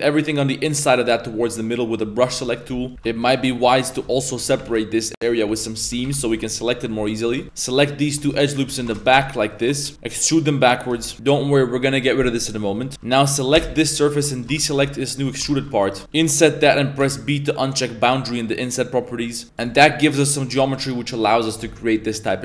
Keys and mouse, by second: 2.5 middle click, 2.7 z, 7.4 ctrl+z, 7.4 2, 7.5 right click, 7.9 ctrl+right click, 8.4 shift+right click, 8.9 ctrl+shift+z, 8.9 shift+right click, 9.5 ctrl+right click, 9.8 middle click, 9.9 e, 9.9 g, 10.9 z, 11.0 middle click, 12.7 middle click, 12.9 3, 13.5 a, 13.5 l, 14.3 alt+shift+right click, 14.5 z, 15.0 alt+shift+right click, 15.5 ctrl+z, 15.8 alt+shift+right click.